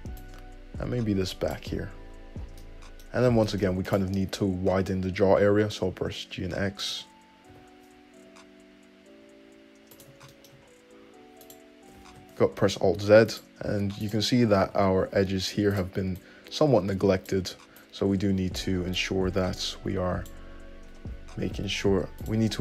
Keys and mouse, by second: 1.9 `, 4.2-5.2 alt+middle drag, 4.5 `, 5.8 g, 7.7 g, 8.2-10.3 shift+middle drag, 10.5-11.7 shift+middle drag, 11.7 click, 11.7-13.5 middle drag, 12.3 alt+z, 13.5 click, 13.7 middle click, 14.3 ctrl+right click, 14.9 g, 16.4 right click, 17.2-22.5 drag, 22.5 middle click.